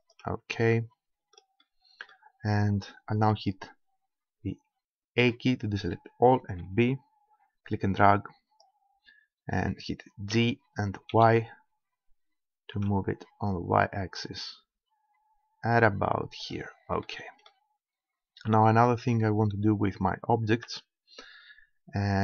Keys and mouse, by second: 0.2-1.6 drag, 1.6 middle click, 5.2 a, 6.6 b, 10.4 g, 16.5 click, 17.2-18.5 middle drag, 20.7 Tab.